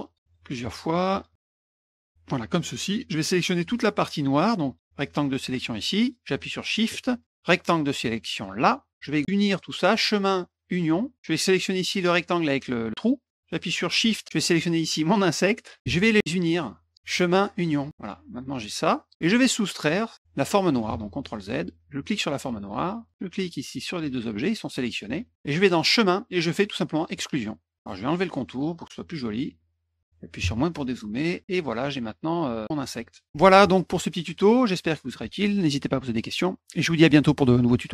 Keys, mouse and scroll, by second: 0.1 click, 0.2 click, 0.4 click, 0.6 click, 0.7 click, 0.9 click, 1.1 click, 1.3 click, 1.4 click, 1.7 click, 1.7 click, 1.8 click, 1.9 click, 2.0 click, 4.8-6.1 drag, 7.3-8.6 shift+drag, 9.9 click, 10.8 click, 15.6 shift+click, 17.0 click, 17.9 click, 18.1-19.1 drag, 19.9 click, 20.9 ctrl+z, 21.2 middle click, 22.0 shift+click, 23.0 click, 23.3 shift+click, 25.8 click, 27.1 click, 29.5 middle click, 31.0 middle click, 31.6 click.